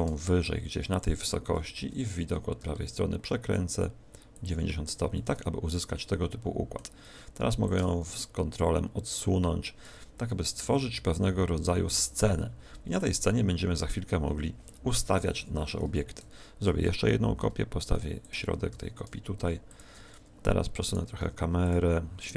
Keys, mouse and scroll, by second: 1.6 KP_1, 1.8 KP_3, 2.5 r, 4.4 ctrl+click, 5.1 middle click, 7.6 click, 10.6 middle click, 15.0 KP_1, 16.6 KP_7, 16.6 shift+d, 18.2 ctrl+click, 19.7 ctrl+click, 19.7 r, 21.6 click, 22.2 right click.